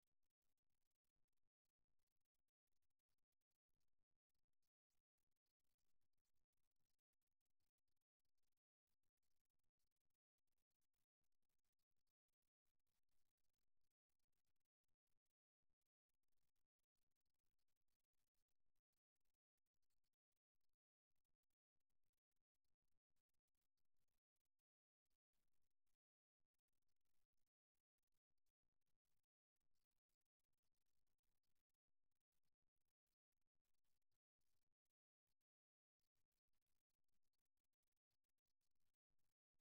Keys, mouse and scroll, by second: 3.1-4.3 middle drag, 4.3 right click, 4.7-8.2 middle drag, 8.9 g, 12.3-14.2 middle drag, 15.5-17.3 right drag, 18.1 KP_1, 19.1-20.5 middle drag, 20.5 click, 21.1 right click, 25.4 right click, 26.9 right click, 28.0-29.5 right drag, 30.8 right click, 31.8-33.1 right drag, 35.1-36.9 right drag, 38.3-39.6 right drag.